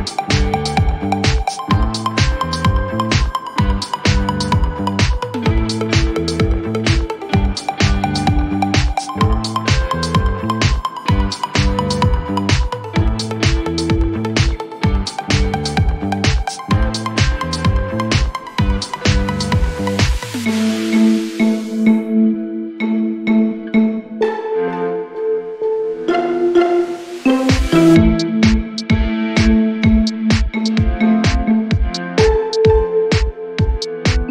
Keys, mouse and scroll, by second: 0.6 ctrl+z, 3.4 click, 7.0 click, 9.4 click, 16.3 click, 23.0 click, 29.5-31.1 click, 33.5 click.